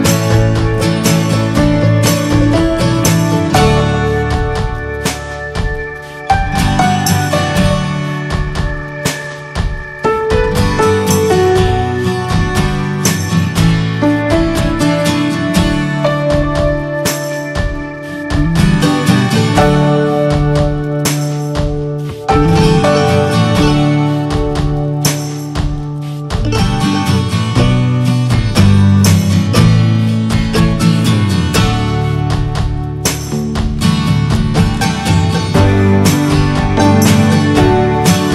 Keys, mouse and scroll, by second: 1.4 click, 1.8 scroll down 3, 2.0 middle click, 2.5 scroll up 1, 2.7 middle click, 3.7-4.1 scroll up 4, 3.9 middle click, 4.2-6.8 shift+middle drag, 6.8 click, 7.0-7.7 scroll down 8, 7.3 middle click, 7.9 shift+middle click, 8.0-9.2 scroll up 6, 8.2 middle click, 8.5 shift+middle click, 8.8 middle click, 9.1 shift+middle click, 10.7-11.4 scroll up 1, 11.4-13.5 drag, 13.5 scroll up 2, 13.7 shift+middle click, 14.2 scroll up 2, 16.1-17.0 scroll up 1, 17.0 click, 17.9-19.1 scroll up 2, 19.1 click, 19.3 ctrl+z, 20.1 click, 21.4 click, 21.8-23.2 scroll down 4, 22.0 middle click, 22.5 shift+middle click, 23.2-23.6 scroll up 6, 23.5 shift+middle click, 24.7-26.3 drag, 26.3 scroll up 2, 26.6 shift+middle click, 27.5 click, 27.8-29.3 shift+middle drag, 29.3 scroll up 1, 29.8-31.0 shift+middle drag, 31.0-32.6 drag, 32.6-33.0 scroll down 2, 33.0 middle click, 33.6 shift+click, 34.1 shift+middle click, 34.8-37.4 drag, 37.4-38.1 scroll down 3, 37.6 middle click, 38.1 shift+middle click.